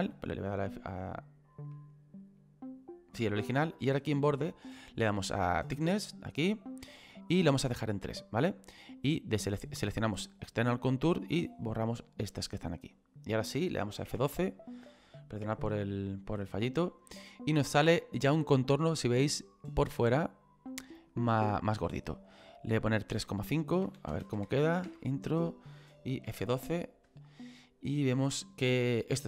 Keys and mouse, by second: 3.6 click, 5.7 click, 10.2 click, 14.1 F12, 22.8 click, 23.9 KP_3, 24.1 KP_Decimal, 24.3 KP_5, 26.3 F12.